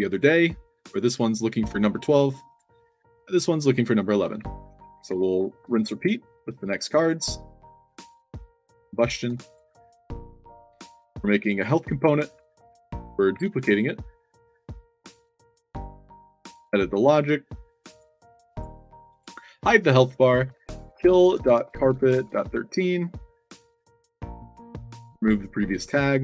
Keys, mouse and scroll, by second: 2.4 click, 3.9-5.5 typing, 3.9 click, 7.8 click, 8.4 click, 9.3 click, 9.7 click, 10.8 click, 11.5 click, 13.2 ctrl+d, 14.1-14.7 shift+drag, 15.3 click, 16.0-16.5 scroll down 4, 17.6 click, 18.4 click, 19.0 click, 19.6 click, 20.5-22.9 typing, 23.5 click, 24.5 click.